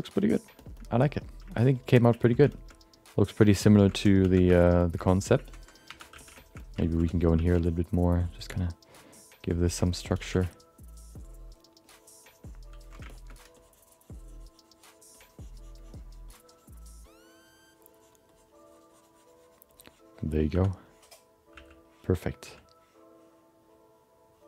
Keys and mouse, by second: 0.2 alt+middle click, 0.6 shift+middle click, 0.7 alt+middle click, 1.5 middle click, 1.8 alt+middle click, 2.2 ctrl+alt+middle click, 2.5 shift+middle click, 2.7 alt+middle click, 3.3 ctrl+alt+middle click, 3.6 shift+middle click, 3.8 middle click, 4.2 3, 4.4 f, 4.8 alt+shift+middle click, 5.0 alt+middle click, 5.5 ctrl+middle click, 5.9 1, 6.1 f, 6.4 alt+shift+middle click, 6.6 alt+middle click, 6.8 ctrl+middle click, 7.3 f, 7.7 ctrl+click, 9.3 ctrl+click, 9.8 alt+shift+middle click, 10.5-11.7 ctrl+drag, 10.5 f, 11.8-12.9 ctrl+drag, 13.1 alt+shift+middle click, 14.3-20.5 drag, 20.5 2, 21.5 f, 22.2 click, 22.4 f.